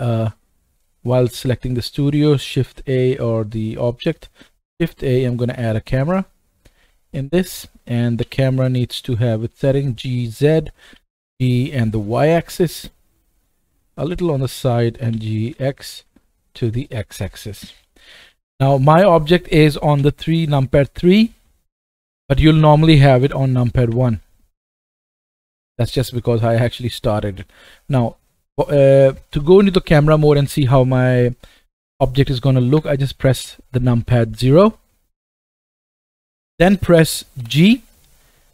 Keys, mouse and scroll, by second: 0.7 click, 1.4 click, 3.3 click, 3.6 click, 4.4 shift+a, 7.3 middle click, 8.1 g, 9.1-21.4 right drag, 10.9 g, 15.0 g, 18.3 KP_1, 20.0 KP_3, 21.1-21.4 scroll up 2, 21.4-21.8 shift+middle drag, 21.8-24.7 shift+right drag, 23.2 KP_1, 23.8 KP_3, 24.6 middle click, 25.1 right click, 25.2-26.2 right drag, 25.7 middle click, 26.3 middle click, 26.3 scroll up 2, 26.6-27.4 shift+middle drag, 32.7 KP_0, 37.4 g.